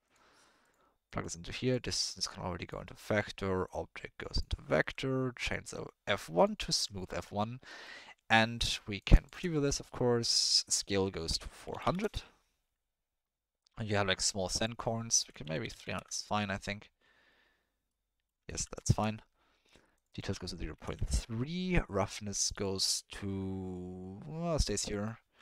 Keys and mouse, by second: 1.0 click, 1.5 click, 2.1-2.7 drag, 3.6-4.4 drag, 4.8 ctrl+middle drag, 5.4-6.5 drag, 7.1 ctrl+middle click, 7.8 middle click, 8.7 middle click, 8.9 click, 9.2 ctrl+shift+click, 9.5 middle click, 10.5-12.0 drag, 11.8 0, 14.5-16.0 drag, 15.7 0, 17.9 click, 18.5 ctrl+click, 18.8 shift+click, 20.0-21.0 drag, 22.4-24.6 drag, 24.9 middle click.